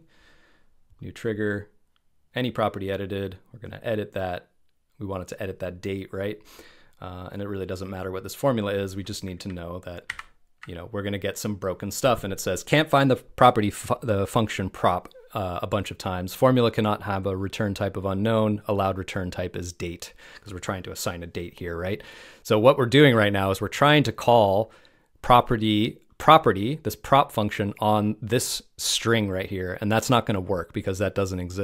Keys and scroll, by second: 10.0 super+v, 11.6 super+v.